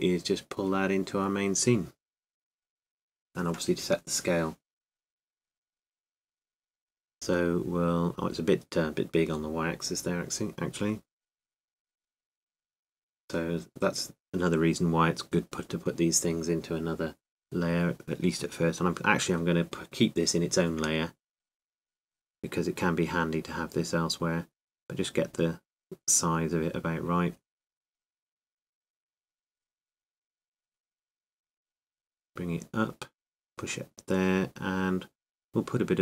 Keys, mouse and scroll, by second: 5.1-8.0 drag, 6.6-10.4 middle drag, 11.0-13.9 drag, 13.5-16.2 middle drag, 16.7 a, 17.2 a, 17.7 a, 18.6 s.